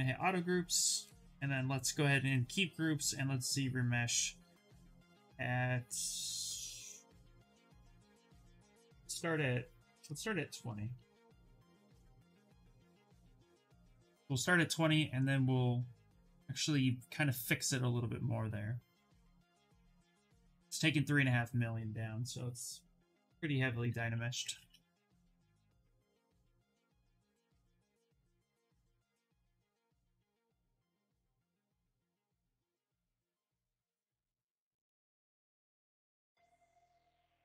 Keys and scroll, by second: 0.4 2, 8.6 1, 9.6 BackSpace, 10.2 2, 10.8 0, 11.1 Return.